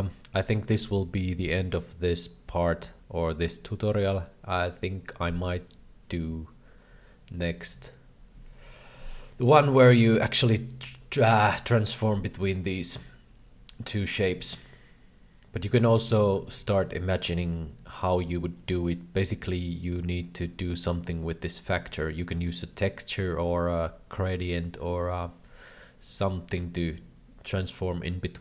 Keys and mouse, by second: 2.7-6.0 drag, 6.6-8.0 drag, 9.3-15.7 drag, 16.0 middle click, 16.6 alt+a, 16.6 b, 17.3 c, 18.4 alt+a, 18.6 middle click, 19.8-26.5 drag, 27.0-28.4 drag.